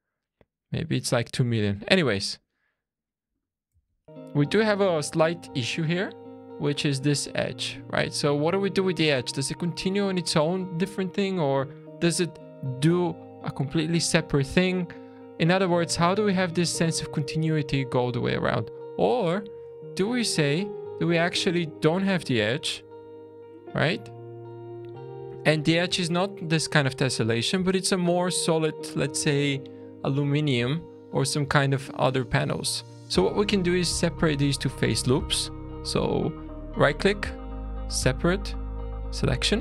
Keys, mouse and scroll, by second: 2.3 click, 2.9 scroll down 2, 3.3 click, 3.8 Tab, 3.9-4.9 scroll up 8, 5.0-5.4 scroll down 2, 5.6 shift+middle click, 10.8-15.3 scroll down 4, 18.2 scroll down 2, 18.7 middle click, 19.5 scroll up 2, 20.6 middle click, 21.2 Tab, 21.4 click, 22.7 shift+d, 24.5 middle click, 24.7 Tab, 25.3 alt+a, 25.3 alt+scroll up 2, 25.5 2, 26.0 alt+click, 26.8 alt+a, 26.9 alt+scroll up 1, 27.1 2, 27.7 alt+click, 28.4-29.1 scroll up 2, 28.9 3, 29.5 alt+click, 30.2 scroll up 2, 30.9 alt+shift+click, 31.5-32.7 scroll down 5, 32.7 scroll up 2, 33.6-35.6 scroll up 2, 36.6 right click.